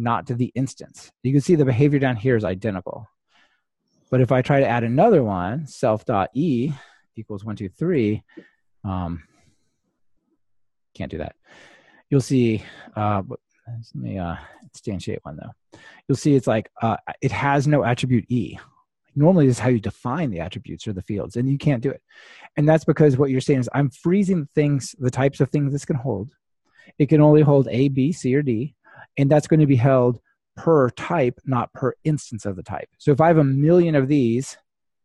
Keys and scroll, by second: 11.5 ctrl+r.